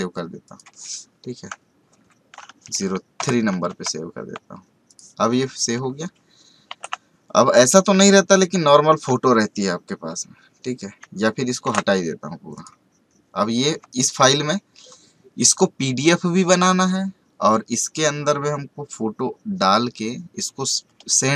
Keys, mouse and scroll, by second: 1.9 Down, 4.8 click, 6.6 ctrl+w, 7.6 space, 7.7 right click, 8.0 click, 8.7 alt+scroll down 1, 11.6 ctrl+w, 12.5 click, 13.8 space, 13.9 right click, 14.1 click.